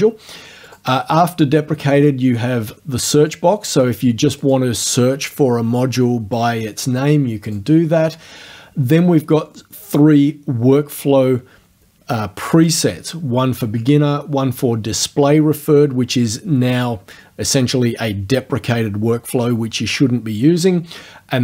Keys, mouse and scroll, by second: 0.7 click, 3.2 click, 4.4 click, 7.5 click.